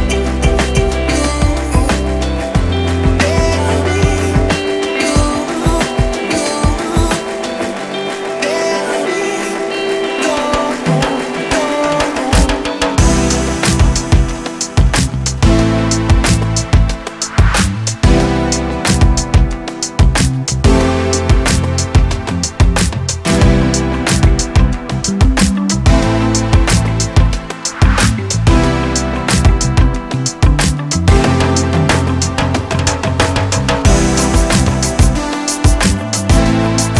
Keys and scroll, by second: 3.4 ctrl+z, 11.4 4, 11.5 Return, 15.1 Escape, 16.1 Return, 16.9 Return, 17.9 Escape, 18.4 2, 18.7 Return, 19.5-22.4 typing, 19.6 Return, 20.4 Return, 20.5 Escape, 21.9 Escape, 22.5 Return, 24.0 Escape, 24.4 1, 25.1 2, 25.6 2, 25.7 Return, 26.1 2, 26.2 Return, 27.2 Escape, 27.8 1, 28.5 2, 28.8 Return, 29.2 2, 31.4 Escape, 31.8 1, 31.9 Return, 32.7 Return, 33.2 2, 34.2 Escape, 34.6 1, 34.7 Return, 35.4 2, 36.5 2, 36.5 Return.